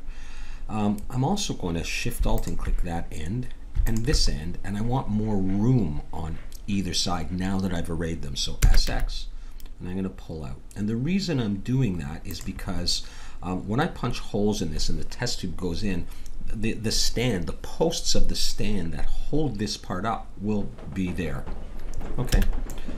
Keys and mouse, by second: 0.1-2.3 middle drag, 2.3-5.6 drag, 5.6-7.1 middle drag, 8.6 s, 22.3 a.